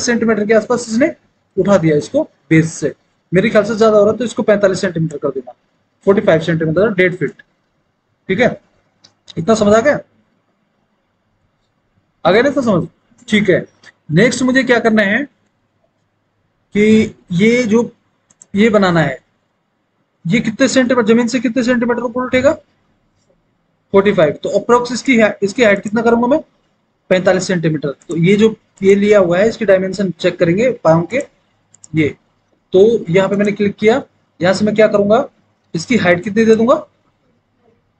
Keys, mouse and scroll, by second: 6.1 KP_4, 6.3 KP_5, 7.2 Return.